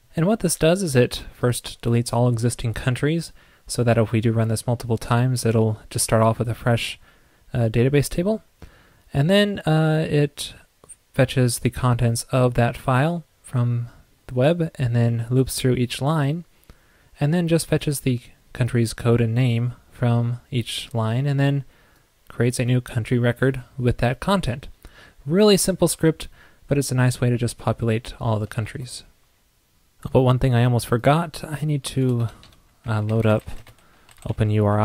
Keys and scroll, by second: 28.7 super+s.